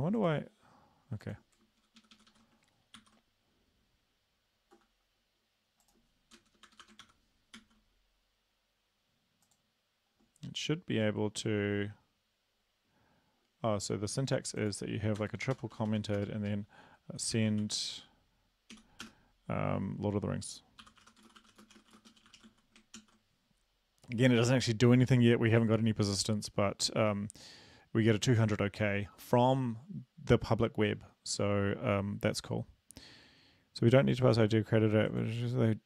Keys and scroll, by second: 2.0 shift+Up, 2.1 shift+Up, 2.3 shift+Right, 3.0 ctrl+c, 6.6 Return, 6.9 Return, 7.0 ctrl+v, 7.5 ctrl+s, 15.2 Return, 15.5-16.1 typing, 17.3-19.0 typing, 20.8-22.4 typing, 23.0 ctrl+s.